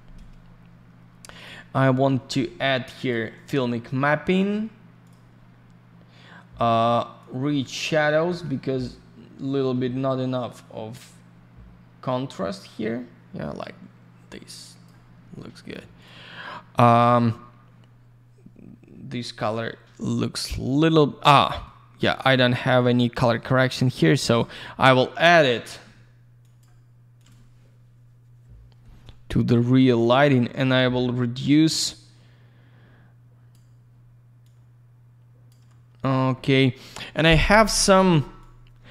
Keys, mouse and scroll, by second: 1.3 click, 2.9 click, 5.0 click, 7.1 click, 15.9 click, 16.0 click, 17.0 middle click, 17.1 middle click, 17.3 scroll down 1, 21.0-21.4 scroll up 1, 21.4 middle click, 21.6 middle click, 21.9 click, 22.1 click, 22.7 click, 23.7 click, 26.4 click, 26.5 click, 27.1 click, 27.2 click, 29.7 click, 34.4 click, 37.7 click, 38.4 click.